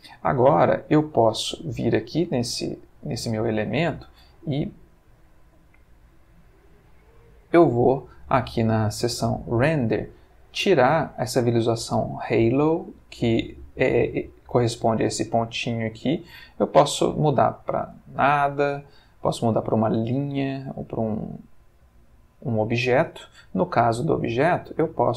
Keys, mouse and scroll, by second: 0.3 click, 4.0-5.1 middle drag, 6.6 click, 7.0-8.0 middle drag, 12.9 click, 15.7-17.3 drag, 18.5-19.9 drag, 20.8-22.9 drag, 24.3 click.